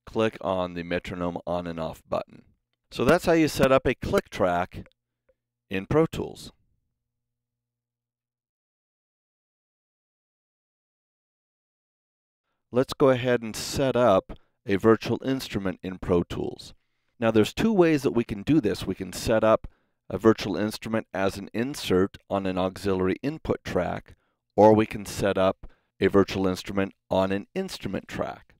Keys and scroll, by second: 3.0 super+=.